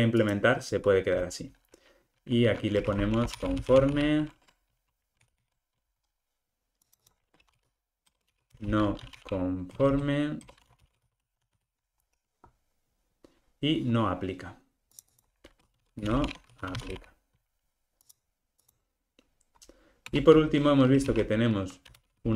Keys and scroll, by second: 5.2 super+d.